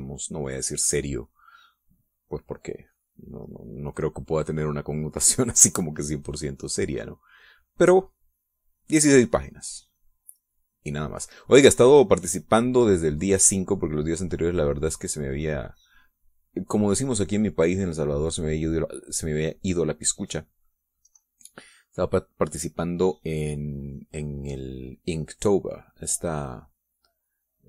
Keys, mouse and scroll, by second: 3.8 middle click, 6.9-13.3 drag, 13.7-16.4 drag, 18.6-21.8 drag, 25.7-27.6 drag.